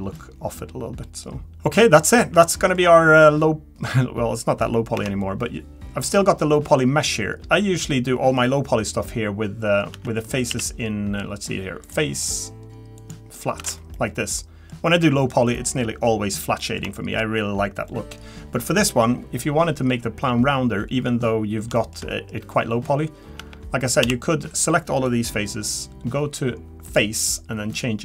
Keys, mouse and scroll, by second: 0.1 middle click, 1.8 middle click, 1.8-2.4 scroll down 3, 2.4 middle click, 2.8-3.2 scroll up 5, 4.2-5.0 scroll down 2, 5.0 Tab, 6.7-7.3 scroll down 2, 7.3 Tab, 7.3 click, 7.3 middle click, 9.9 Tab, 10.4 click, 10.5 a, 11.8 click, 13.6 Tab, 13.9 middle click, 15.5 middle click, 16.6 middle click, 16.9 shift+middle click, 17.0 shift+middle click, 17.3-17.9 scroll up 2, 17.9 middle click, 21.7 shift+middle click, 22.1 middle click, 23.4 Tab, 24.0 a, 26.8 click.